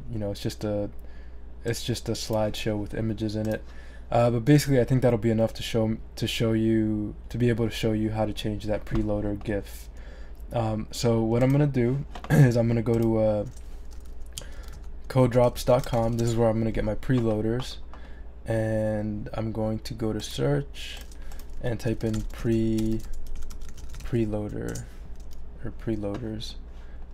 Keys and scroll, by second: 14.1-16.5 typing, 21.7-24.5 typing, 24.7 Return.